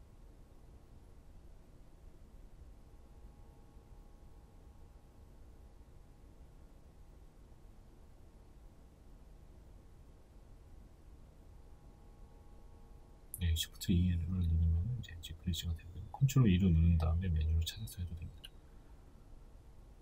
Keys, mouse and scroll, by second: 0.2 shift+right click, 0.6-16.6 middle drag, 17.5 click, 17.8-19.2 middle drag, 18.3 ctrl+z, 19.2 alt+shift+right click, 19.7-20.0 middle drag.